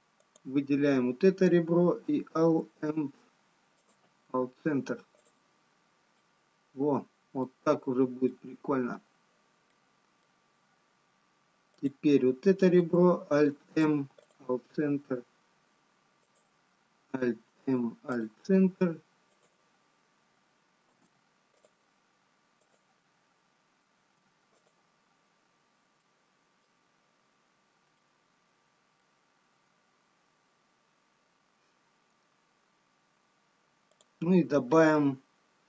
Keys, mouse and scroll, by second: 3.2 alt+m, 4.4 alt+m, 6.1 click, 6.1-7.2 scroll down 1, 7.8 middle click, 7.8 scroll down 1, 10.0 middle click, 12.0 click, 12.0 scroll up 4, 13.8 alt+m, 20.3 click, 21.1 alt+m, 22.9 click, 24.3 alt+m, 26.0 middle click, 26.0-27.8 scroll down 2, 30.5 middle click, 34.0 click.